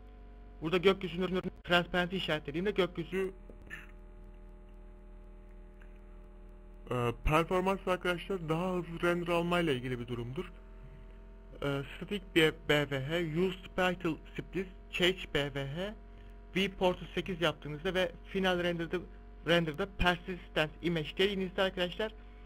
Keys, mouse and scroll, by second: 3.8 click, 6.6 z, 7.0 middle click, 8.1 click, 12.5 click, 14.5 click, 15.8 click, 16.7 click, 19.3 click.